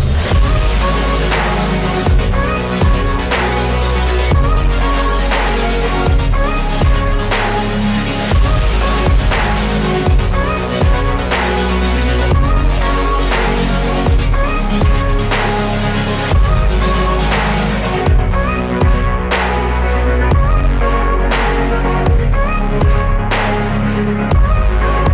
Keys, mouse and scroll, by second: 2.0-2.5 scroll up 2, 2.5 scroll down 1, 2.7-4.2 middle drag, 5.8 click, 6.3 KP_1, 6.8-7.8 scroll up 2, 7.8 click, 8.2-9.7 scroll up 8, 10.3-10.7 scroll down 1, 10.7-12.2 middle drag, 13.5-13.9 scroll down 5, 13.9 middle click, 14.8-15.7 scroll up 2, 15.8-16.2 scroll down 5, 16.2 middle click, 17.1 click, 17.4-18.1 scroll up 3, 18.1-18.4 scroll down 2, 18.4-19.9 middle drag, 22.1 middle click, 24.1-24.4 scroll down 3, 24.8 KP_1.